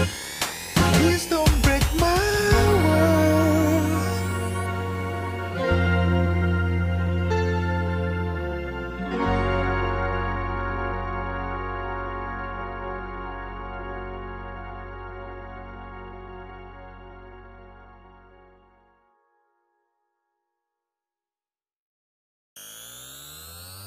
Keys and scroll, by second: 21.8 alt+Page_Down, 23.0 Escape.